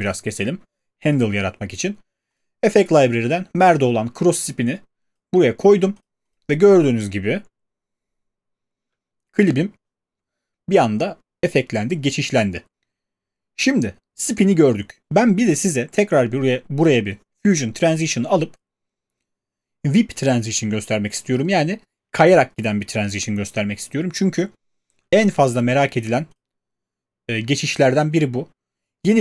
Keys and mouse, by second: 0.1 click, 1.1 click, 6.1 click, 6.7 click, 8.8 space.